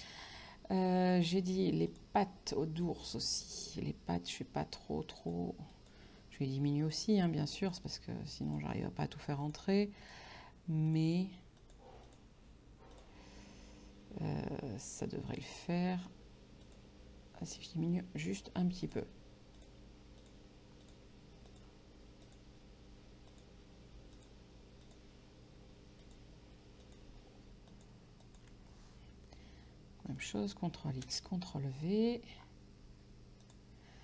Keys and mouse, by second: 1.9 click, 3.5 click, 5.3 click, 6.9 click, 15.4 click, 16.7 click, 23.4 click, 26.1 click, 30.1 ctrl+x, 31.5 v, 33.5 click.